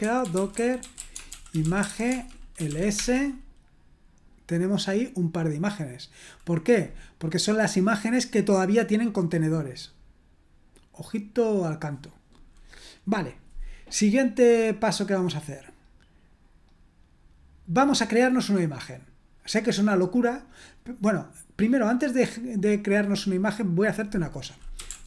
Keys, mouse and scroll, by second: 0.0-3.2 typing, 16.4 scroll down 1, 22.3 click, 24.5-25.0 typing.